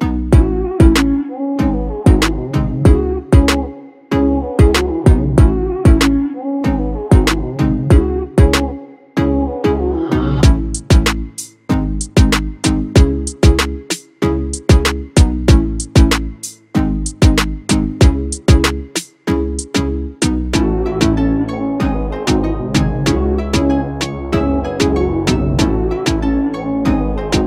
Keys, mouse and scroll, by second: 0.3 BackSpace, 0.6 8, 21.3 double click, 25.1 shift+click, 27.0 shift+click.